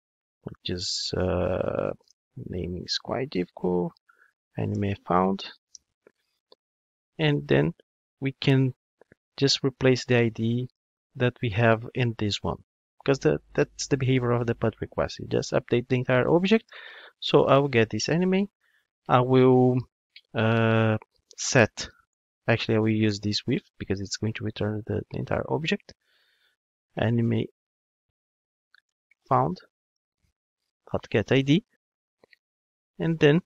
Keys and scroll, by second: 17.7 Return, 23.1 Return, 28.2 Return.